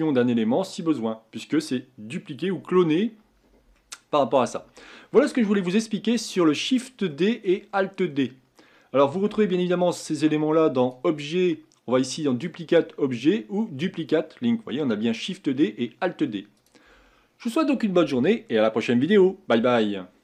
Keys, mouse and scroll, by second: 3.8 middle click, 4.7-5.6 scroll down 2, 5.6-9.3 shift+middle drag, 9.3 Tab, 10.8-13.9 drag, 16.6 click.